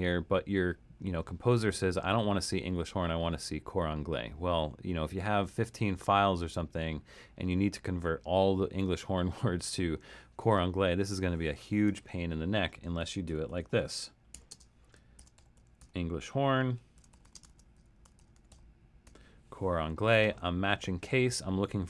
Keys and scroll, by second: 12.8-19.1 typing.